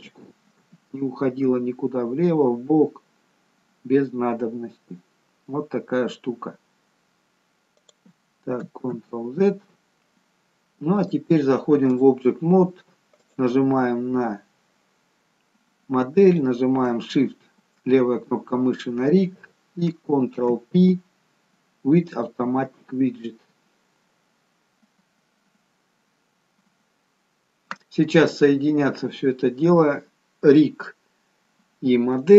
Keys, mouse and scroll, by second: 0.8 g, 9.1 ctrl+z, 11.2 click, 13.7 click, 16.4 shift+click, 20.5 ctrl+p.